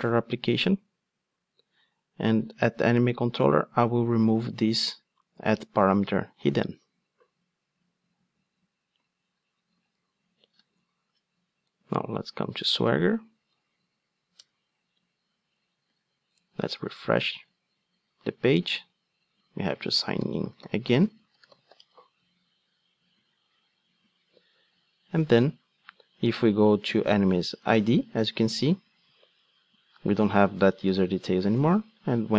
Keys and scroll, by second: 6.5 super+x.